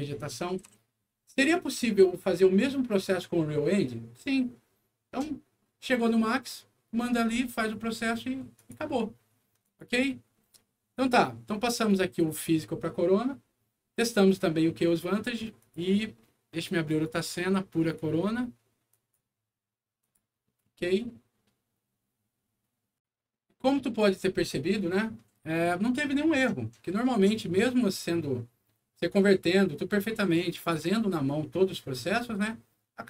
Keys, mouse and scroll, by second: 0.0-0.3 typing, 3.6 s, 8.5 click, 9.5 click, 15.5 click, 16.8 click, 18.8 click, 19.9 click, 22.9 click.